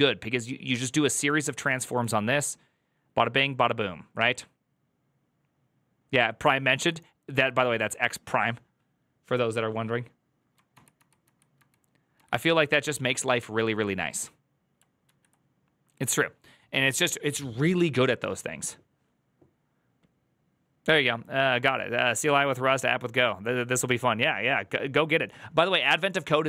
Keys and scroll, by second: 10.7 ctrl+z, 10.9 ctrl+z, 11.2 ctrl+z, 11.5 ctrl+z, 12.1 ctrl+z, 15.0 alt+[.